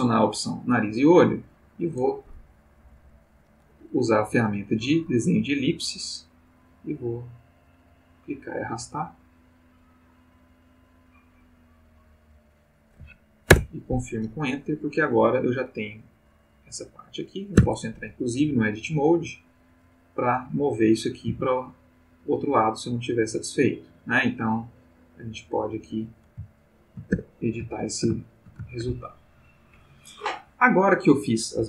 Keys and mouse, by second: 0.3 click, 1.7 click, 6.4-12.6 drag, 13.5 Return, 17.6 Tab, 19.1 click, 19.8 click, 20.6 click, 21.3 g, 25.7 click, 26.5-27.2 ctrl+middle drag, 27.1 ctrl+Tab, 27.7-29.0 ctrl+drag.